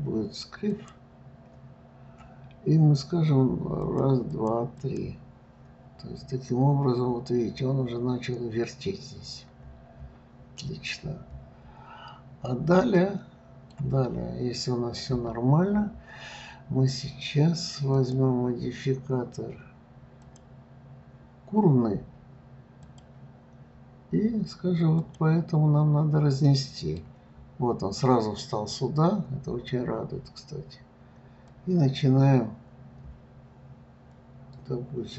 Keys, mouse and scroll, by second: 3.8-5.3 drag, 6.2-9.1 scroll up 9, 9.1-10.5 scroll down 8, 10.5 middle click, 11.0-12.9 scroll down 12, 12.9-14.1 middle drag, 14.1-17.1 scroll up 4, 17.9-20.9 drag, 22.8 click, 26.4-27.3 middle drag, 27.3-27.8 scroll up 3, 31.5-34.4 drag.